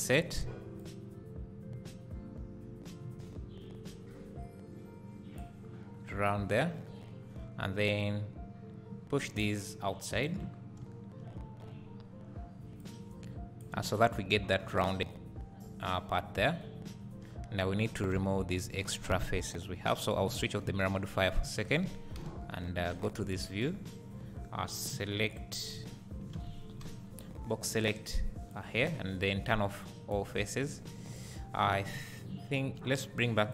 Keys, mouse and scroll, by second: 0.8 click, 5.7-6.2 scroll down 1, 6.6 `, 7.2-8.0 scroll up 1, 10.2 click, 10.6 scroll down 1, 10.8 `, 12.8-20.0 drag, 17.4-17.7 scroll down 1, 17.7 1, 18.0 scroll down 2, 22.2 KP_1, 25.7 z, 26.4 alt+a, 26.8 b, 28.8 x, 31.2 alt+click.